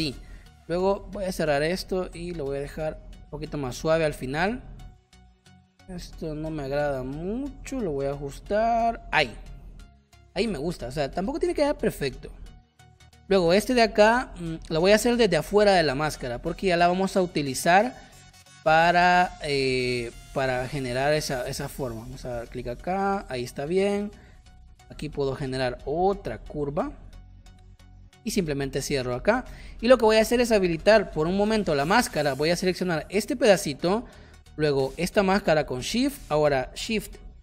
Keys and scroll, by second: 10.7 space, 12.1 space, 12.9 space, 29.4 v.